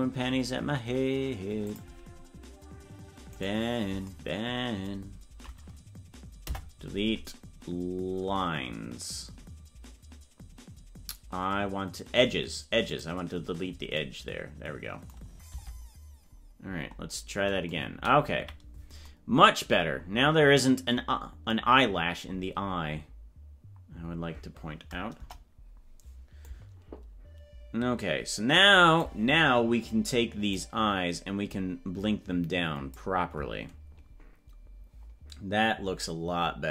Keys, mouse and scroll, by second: 1.7 click, 3.3 right click, 6.4 Delete, 15.6 Tab, 16.3 scroll down 1, 16.8-17.2 scroll down 10, 18.4 KP_Decimal, 20.1 scroll up 4, 25.2 KP_0, 26.5-29.2 drag, 30.5-33.1 drag, 36.0-36.7 drag.